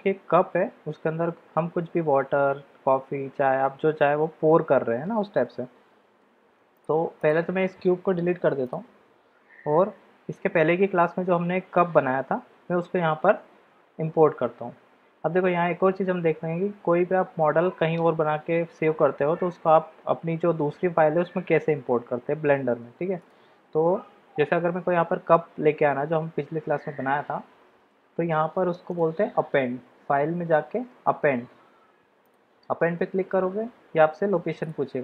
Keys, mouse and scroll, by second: 6.7 click, 8.3 x, 23.2 click, 28.9-32.8 drag.